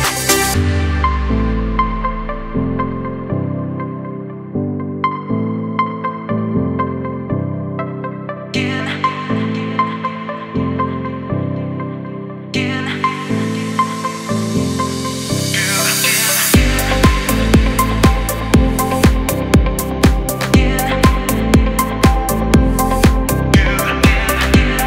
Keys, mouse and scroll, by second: 0.5 space, 0.5 click, 1.0 space, 1.8 space, 2.7 click, 7.3-7.7 alt+scroll down 1, 7.9 space, 8.0 click, 8.4 space, 8.8-20.9 drag, 22.6 ctrl+c, 23.4 click.